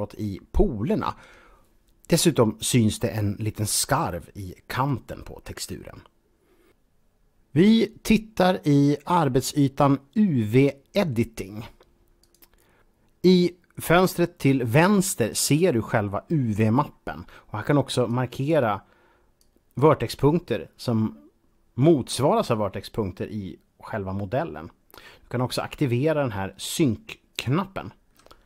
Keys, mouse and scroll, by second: 2.3 middle click, 12.2 click, 17.0-17.9 scroll up 1, 17.9 click, 19.3 click, 20.4 click, 22.6-24.2 scroll up 1, 27.0 click.